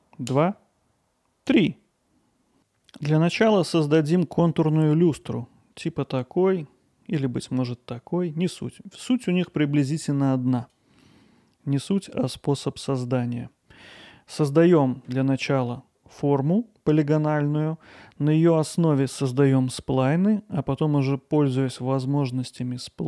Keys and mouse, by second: 11.0-11.8 middle drag, 14.2-14.9 middle drag.